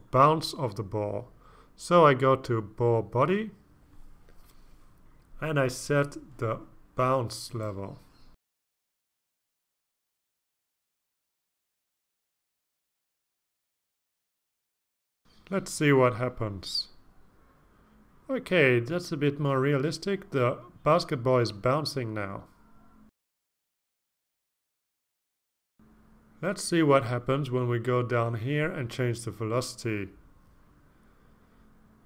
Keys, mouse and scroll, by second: 3.3 click, 5.3-5.9 scroll down 2, 7.3 click, 9.6 click, 13.5 click, 22.3 click, 26.1-27.2 scroll up 2, 27.4-28.5 scroll down 2, 29.1 click, 30.2 click, 31.5 KP_1, 31.9 KP_0.